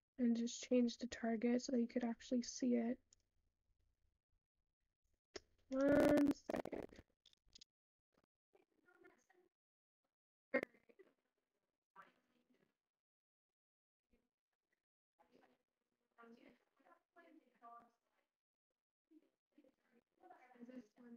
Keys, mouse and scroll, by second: 2.0 click, 12.4 shift+middle click, 13.2-14.3 scroll up 3, 14.3 shift+d.